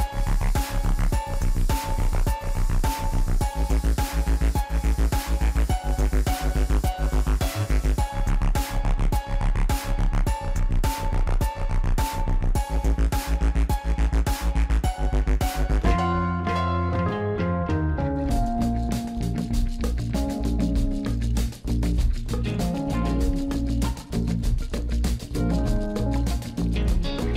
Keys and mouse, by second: 0.6 alt+shift+click, 2.2 middle click, 3.9 middle click, 5.4 alt+shift+click, 5.7 middle click, 7.5 alt+shift+click, 7.8 alt+shift+click, 8.1 middle click, 8.8 alt+shift+click, 9.8 middle click, 10.5 shift+middle click, 10.7 ctrl+z, 10.7-12.7 drag, 14.8-17.4 drag, 18.6 Tab, 20.0 Tab, 21.3 click, 24.9 middle click, 25.6 click, 26.1 alt+shift+click, 26.4 middle click, 26.6 alt+shift+click, 27.0 alt+shift+click, 27.2 middle click.